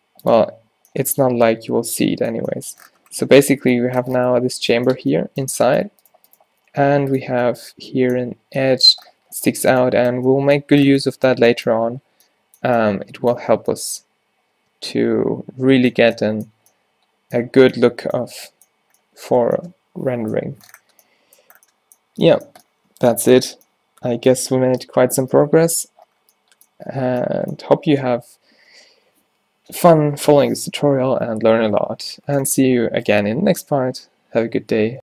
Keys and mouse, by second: 4.2 Tab, 5.1 Tab, 6.1 Tab, 6.5 g, 7.4 Tab, 15.5-16.0 middle drag, 16.3-17.8 middle drag, 18.0 middle drag, 18.5 middle drag.